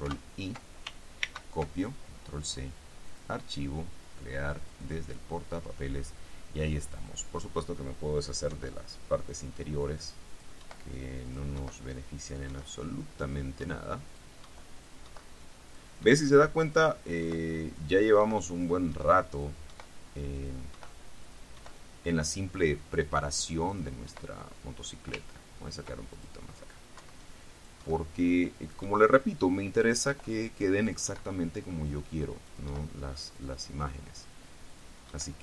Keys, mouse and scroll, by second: 0.2 ctrl+i, 1.4 ctrl+c, 3.2 click, 4.8 click, 7.1 click, 8.6 Delete, 10.2 click, 10.8 Delete, 11.4 click, 11.7 Delete, 12.3 click, 12.6 Delete, 13.4 click, 13.8 Delete, 14.2 click, 14.9 click, 15.8 click, 16.2 Delete, 16.8 click, 17.2 Delete, 17.8 click, 18.4 Delete, 18.7 click, 19.4 click, 19.8 Delete, 20.5 click, 20.8 Delete, 21.4 click, 21.8 Delete, 23.8 click, 24.2 Delete, 25.4-25.9 ctrl+scroll up 2, 26.3 ctrl+click, 27.1 Delete, 27.7 click, 28.0 Delete, 28.8 click, 29.0 Delete, 30.1 click, 30.2 Delete, 31.0-31.7 drag, 31.7 Delete, 32.6 click, 32.8 Delete, 33.3 click, 34.8 click, 35.2 Delete.